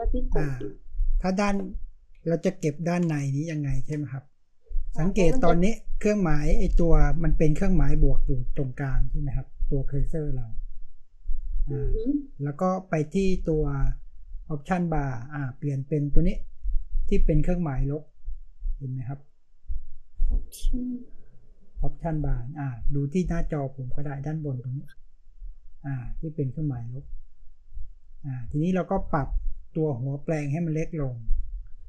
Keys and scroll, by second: 2.1 space.